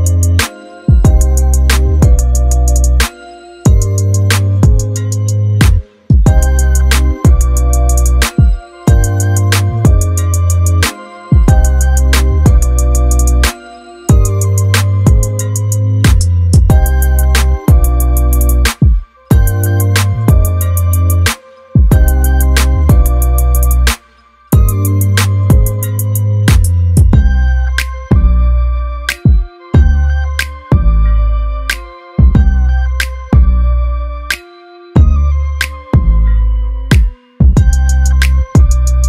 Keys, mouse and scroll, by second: 0.0 middle click, 1.8-2.7 scroll down 1, 4.3-5.3 drag, 5.8-6.7 scroll up 1, 6.9-9.7 drag, 10.0 middle click, 11.6-18.9 drag, 19.0 middle click, 20.3 click, 27.4-29.2 drag.